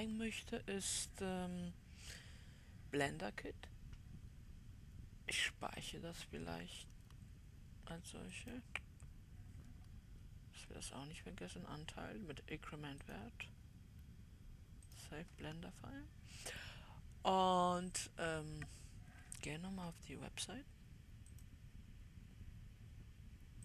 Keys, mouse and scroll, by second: 6.3-23.6 drag.